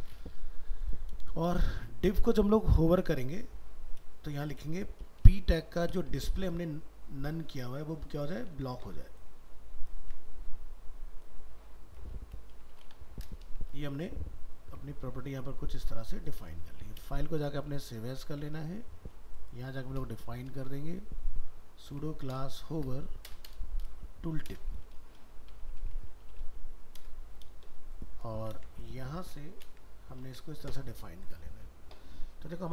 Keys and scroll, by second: 8.6 ctrl+c, 13.8 ctrl+s, 16.7 alt+f, 16.8 alt+移, 18.6 ctrl+Tab, 21.0 ctrl+shift+Left, 28.3 ctrl+a, 28.6 ctrl+c, 29.4 ctrl+a.